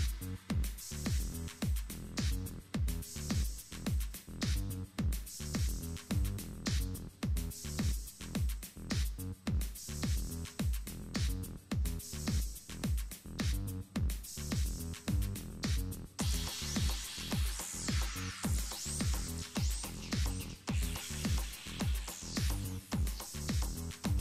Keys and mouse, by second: 2.8 middle click, 3.4 z, 3.9 right click, 4.5-6.5 drag, 5.7 x, 6.3 z, 6.5 middle click, 7.0 ctrl+Tab, 8.7 ctrl+Tab, 9.3-10.7 middle drag, 10.7 ctrl+b, 13.3 Tab, 13.6 click, 14.0 Tab, 15.1 right click, 21.0-22.3 middle drag, 22.3-24.2 right drag.